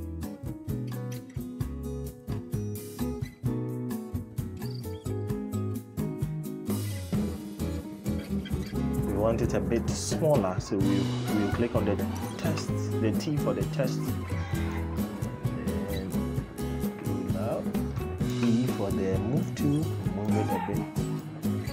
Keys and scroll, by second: 18.1 e.